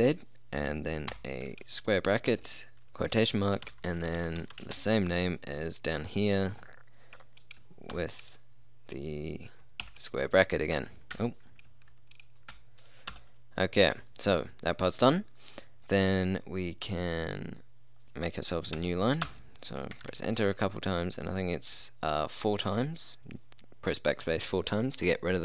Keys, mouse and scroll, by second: 1.1 [, 2.4-4.8 typing, 8.0 shift+', 11.2 BackSpace, 13.2 Return, 18.8 Return, 19.3 Return, 20.0-20.5 BackSpace.